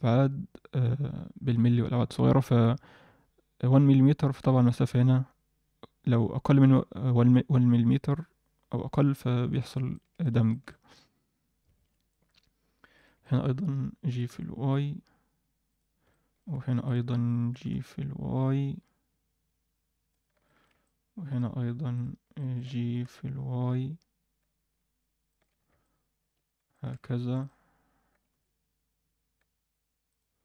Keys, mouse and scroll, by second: 4.5 middle click, 9.9 middle click, 10.5 alt+shift+middle click, 12.0 alt+middle click, 12.9 click, 13.2 middle click, 14.0 g, 16.0 alt+middle click, 16.8 click, 17.5 g, 20.4 alt+shift+middle click, 20.8 middle click, 21.9 click, 22.3 alt+middle click, 22.8 g, 25.5-26.0 scroll down 2, 25.8 middle click, 26.4-26.9 scroll up 2, 26.7 shift+middle click, 27.3 click, 28.1 g.